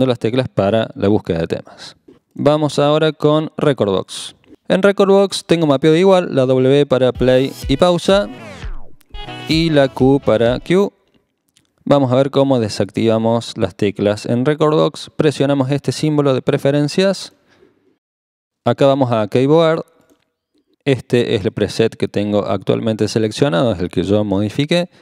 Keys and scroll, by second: 7.1 typing, 9.1 w, 10.7 q.